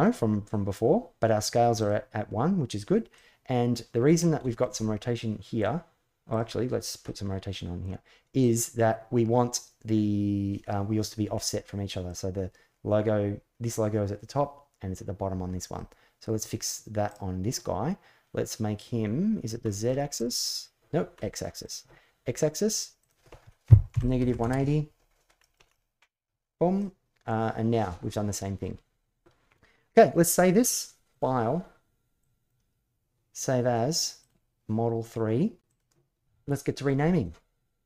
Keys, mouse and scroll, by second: 1.6 click, 2.9 middle click, 4.2 shift+middle click, 4.6-5.4 middle drag, 6.1 click, 6.8-7.6 middle drag, 8.2 click, 11.1-11.9 middle drag, 15.5-16.2 middle drag, 16.8 click, 19.4 middle click, 20.0 click, 20.9 middle drag, 21.4-24.7 drag, 25.2 shift+middle drag, 25.5 middle drag, 26.5-27.6 middle drag, 28.1-28.4 middle drag, 31.0-32.5 drag.